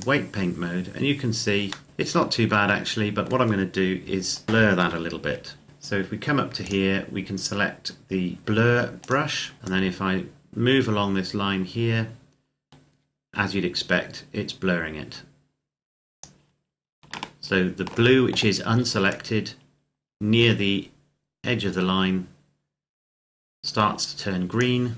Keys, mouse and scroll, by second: 1.7 middle click, 4.0-4.6 scroll up 1, 4.6 KP_7, 6.5 click, 8.9 click, 9.6 scroll up 1, 9.6 click, 17.1 shift+middle click, 18.9 click.